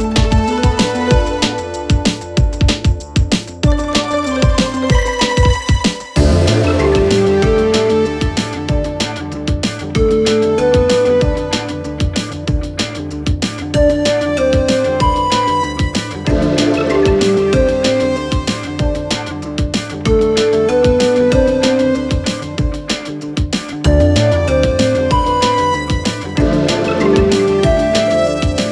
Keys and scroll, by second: 0.5 Delete, 2.8 4, 6.2 shift+f, 19.9 4, 20.7 3, 23.3 ], 23.7 ], 24.4 ], 25.6 ], 27.3 4.